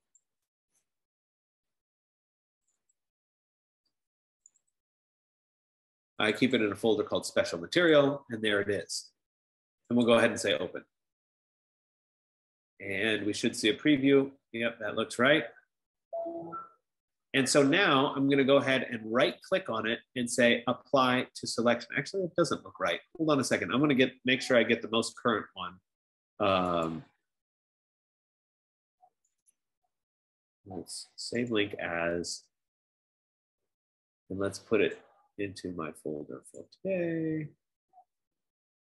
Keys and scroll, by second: 37.5 F15.